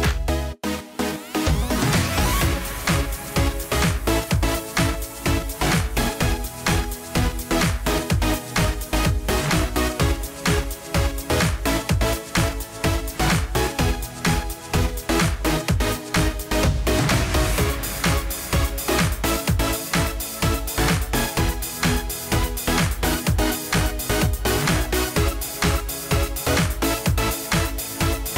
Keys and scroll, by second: 7.2 ctrl+a.